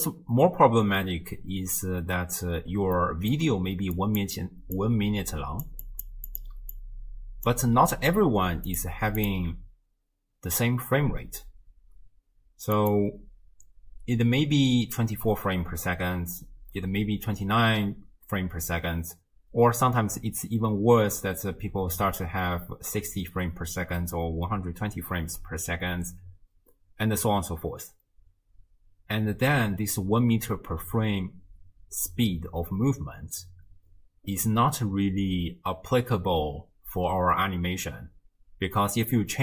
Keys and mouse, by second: 3.0 middle click, 3.6-7.6 typing, 4.0 click, 4.8 click, 5.9 click, 6.3 click, 6.8 click, 9.2 click, 12.9-28.8 drag.